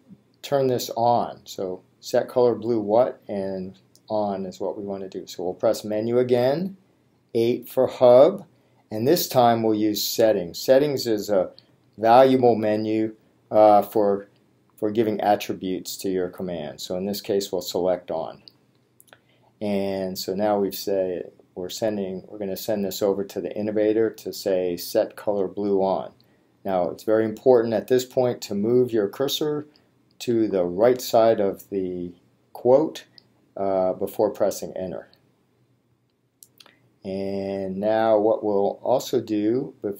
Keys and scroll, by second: 5.6 Menu, 7.5 8, 10.0 Down, 11.7 Return, 30.4 Right, 36.0 Return.